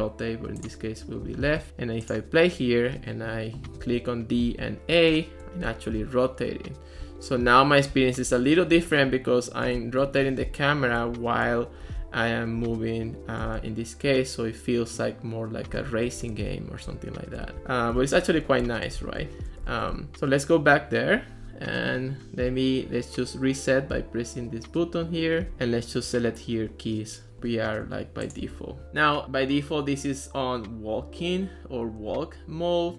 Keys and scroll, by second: 2.2 d, 3.8-6.0 typing, 7.1 a, 7.9 w, 8.4 a, 9.5-13.6 typing, 15.9-20.2 typing.